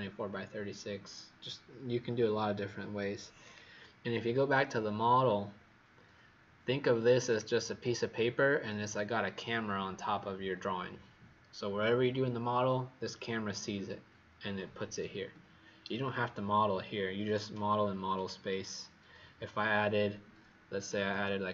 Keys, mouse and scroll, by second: 3.4 click, 21.1-21.5 typing.